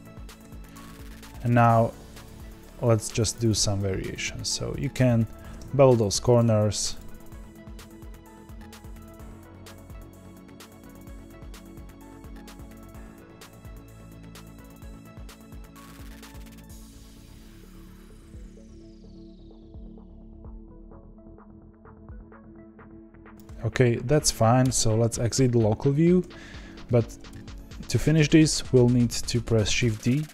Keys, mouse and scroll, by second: 0.4 1, 0.7 click, 1.4 ctrl+b, 4.7 click, 5.3 ctrl+b, 6.9 click, 7.4 g, 7.8 click, 7.9 g, 8.5 click, 8.7 ctrl+b, 9.3 click, 9.5 g, 10.0 click, 10.3 ctrl+b, 10.8 click, 11.0 g, 11.4 click, 11.5 ctrl+b, 12.0 click, 12.2 g, 12.8 click, 13.0 ctrl+b, 13.6 click, 13.7 ctrl+b, 14.6 click, 14.8 ctrl+b, 15.7 click, 16.3 KP_Divide, 16.5 scroll up 3, 16.8 click, 17.0 click, 17.6 ctrl+b, 18.1 click, 18.2 ctrl+b, 18.7 click, 19.0 click, 19.1 ctrl+b, 19.6 click, 19.7 ctrl+b, 20.3 click, 20.6 g, 21.0 click, 21.0 g, 21.6 click, 21.8 click, 21.8 ctrl+b, 22.2 click, 22.5 ctrl+b, 22.9 click, 23.1 g, 24.6 KP_Divide, 26.2 a, 27.2 KP_1.